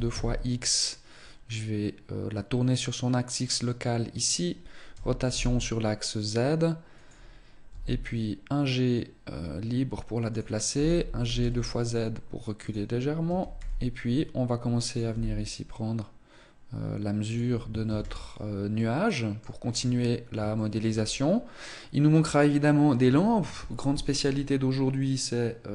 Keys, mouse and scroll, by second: 4.0 click, 4.8 r, 7.5 g, 10.6 g, 13.1 r, 14.8 click, 14.9 g, 17.7 ctrl+s, 18.6 middle click, 19.4-20.2 scroll down 5, 20.4 shift+middle click, 20.8-21.2 scroll up 3.